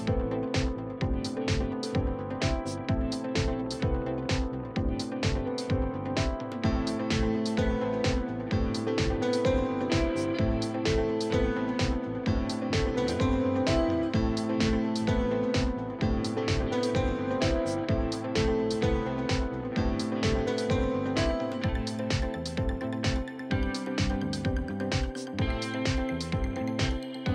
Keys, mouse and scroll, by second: 0.8 middle click, 1.5 alt+click, 1.7 middle click, 2.0 click, 2.6 alt+click, 3.8 click, 4.2-5.7 middle drag, 5.7 click, 6.0 middle click, 6.8 click, 7.5 alt+click, 7.6 shift+middle click, 8.0 click, 8.3 scroll down 1, 8.5 middle click, 9.3 KP_3.